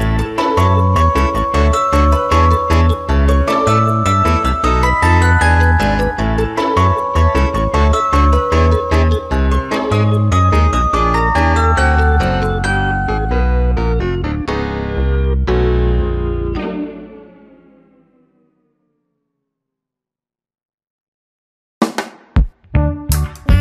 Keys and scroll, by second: 0.5 shift+F2, 1.1 space, 1.4 w, 2.9 ctrl+alt+d, 3.2 Return, 3.9 shift+F2, 5.0 d, 5.9 ctrl+g, 8.2 ctrl+space, 9.1 ctrl+g, 10.5 ctrl+space, 10.9 Return, 15.0 ctrl+space, 17.7 space, 21.5 space.